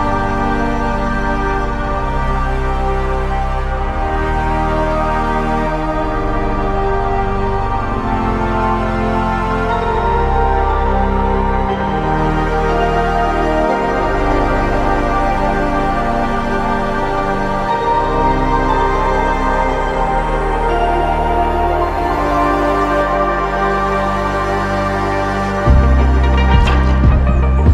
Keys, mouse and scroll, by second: 13.6 alt+shift+click, 26.8 alt+click.